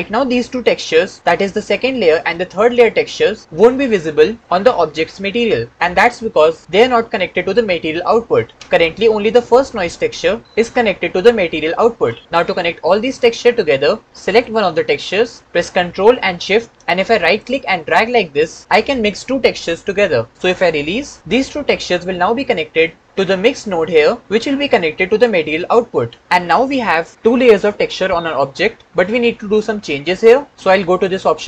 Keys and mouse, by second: 1.2-3.4 drag, 8.5 click, 14.1 click, 17.2-20.7 ctrl+shift+drag, 24.3 click.